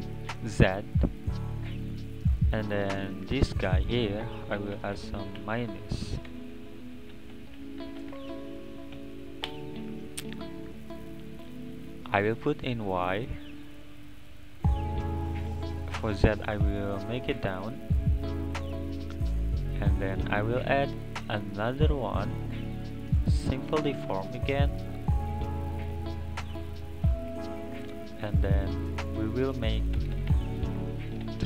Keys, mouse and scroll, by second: 0.6 click, 2.2-2.9 scroll down 4, 2.9 scroll down 1, 3.1-4.9 drag, 4.9 BackSpace, 5.0 BackSpace, 8.2 BackSpace, 10.7-13.0 middle drag, 13.0 click, 15.9-17.3 drag, 18.8-20.1 scroll up 2, 20.1-23.1 drag, 24.4-26.2 middle drag, 26.2 scroll up 1, 26.4-27.4 scroll down 2, 27.4-28.2 scroll down 1, 28.2-29.1 scroll down 2, 29.1 click, 30.1 BackSpace, 30.3 BackSpace.